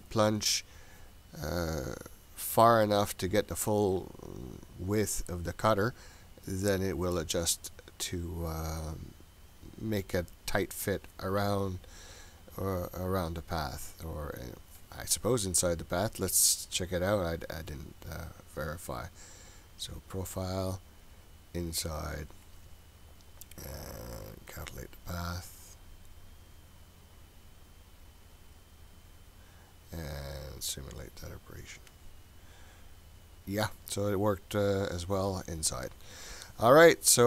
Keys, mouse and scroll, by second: 15.9-17.8 scroll down 8, 17.8-19.3 scroll down 2, 19.3-20.4 scroll up 2, 20.4-22.1 drag, 22.6-23.4 scroll up 5, 24.7 click, 30.7 click.